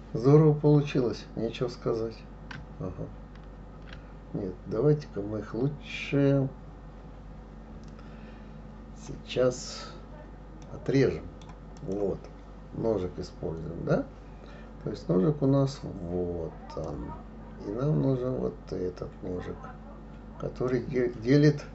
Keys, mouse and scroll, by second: 3.4 ctrl+z, 10.6-11.8 middle drag, 11.8 click, 16.8-19.9 drag.